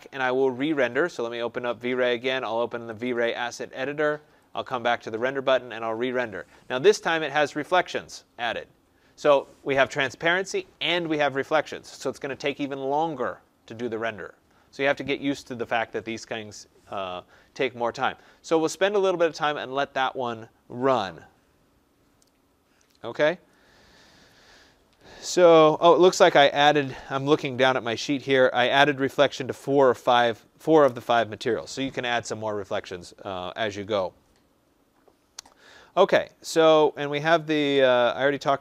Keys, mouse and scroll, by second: 0.6 click, 3.0 click, 4.6 click.